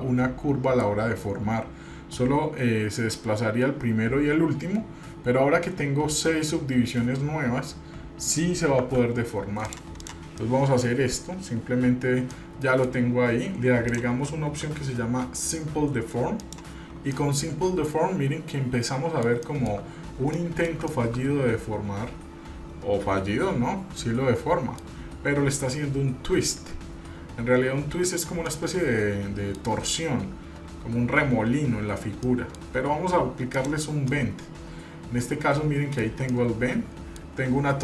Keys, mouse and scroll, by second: 9.0 Tab, 9.8 drag, 10.2 drag, 10.6 middle click, 11.1 scroll down 1, 12.5-13.2 middle drag, 14.1-16.8 drag, 17.3-19.4 middle drag, 19.6-20.0 shift+middle drag, 20.1-20.4 scroll up 1, 20.5-21.0 shift+middle drag, 21.1-25.0 middle drag, 28.7-29.8 middle drag, 32.4 middle click, 33.7 click, 34.3-36.3 middle drag, 36.5-37.4 middle drag.